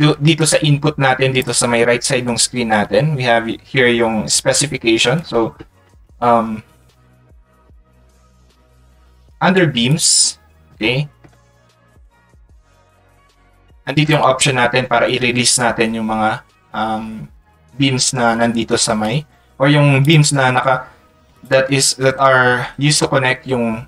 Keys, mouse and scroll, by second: 0.7 ctrl+click, 9.1 click, 10.0 click, 13.0 ctrl+click, 21.4 click.